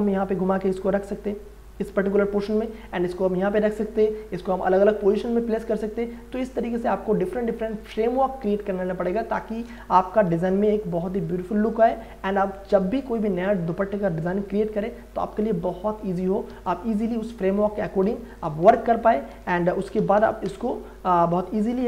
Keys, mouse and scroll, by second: 6.4 click, 9.5 shift+click, 10.3 ctrl+e, 13.3 ctrl+e, 16.5 w, 16.9 click, 18.3 shift+click, 19.3 ctrl+j, 19.7 ctrl+a, 20.0 alt+e, 20.2-20.9 typing.